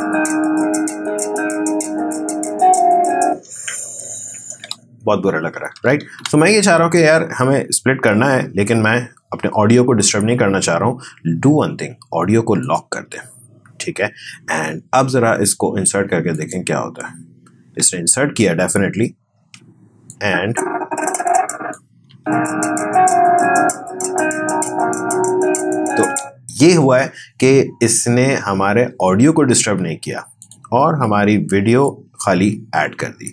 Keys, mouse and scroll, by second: 4.6 space, 6.0 ctrl+z, 12.6 click, 16.3 click, 18.4-18.9 alt+scroll down 1, 20.1-22.1 drag, 22.1 space, 26.1 space, 30.4-33.3 drag.